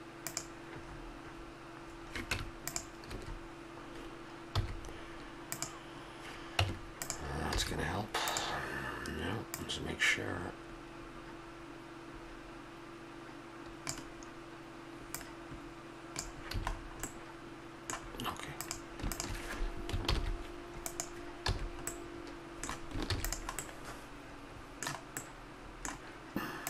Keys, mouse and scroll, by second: 1.9-4.5 middle drag, 2.3 Tab, 3.0 a, 4.5 w, 6.6 Tab, 7.5 a, 7.8-8.3 drag, 11.4 middle click, 16.5 a, 16.7 click, 16.8-17.1 middle drag, 18.6-19.7 right drag, 19.7 click, 20.0 ctrl+l, 21.4 a, 21.8-23.0 middle drag, 23.0 ctrl+s.